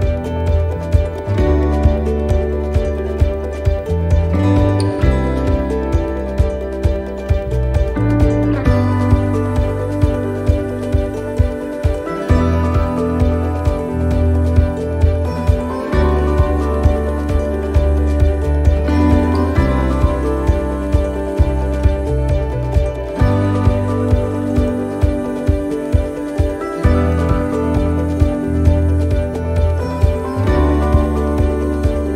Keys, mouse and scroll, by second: 0.1 shift+middle click, 2.1 scroll up 2, 2.6 scroll up 6, 2.9 shift+middle click, 4.0 right click, 5.3 alt+shift+right click, 6.2 right click, 6.8 alt+shift+right click, 8.2 alt+shift+right click, 9.0 shift+right click, 10.1 middle click, 12.2 shift+right click, 13.0 alt+shift+right click, 14.0 ctrl+z, 15.0 alt+shift+right click, 15.9 ctrl+z, 16.7 alt+shift+right click, 17.9 alt+shift+right click, 18.5 middle click, 20.3 alt+shift+right click, 22.1 alt+shift+right click, 22.5 ctrl+z, 23.1 alt+shift+right click, 24.1 shift+right click, 24.5 middle click, 26.6 shift+right click, 27.3 alt+shift+right click, 28.2 ctrl+z, 28.8 alt+shift+right click, 29.5 ctrl+z, 30.1 alt+shift+right click, 31.8 alt+shift+right click.